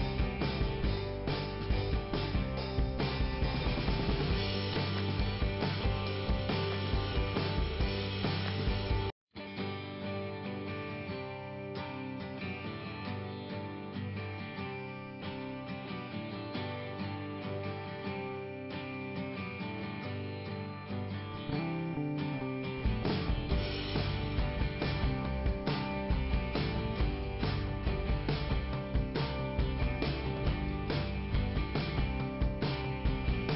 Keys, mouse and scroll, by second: 0.9 click, 1.7 click, 2.5 scroll down 2, 4.1 right click, 8.2 middle click, 9.0 ,, 9.2 click, 11.7 click, 14.8 scroll up 2, 17.1 click, 18.9 click, 19.0 click, 19.4-20.0 scroll down 1, 20.0-20.3 scroll down 1, 22.0 scroll up 2, 24.7 click, 25.6 click, 25.7 click, 26.7 i, 27.7 scroll up 2, 29.5 click, 30.9 click, 31.9 click.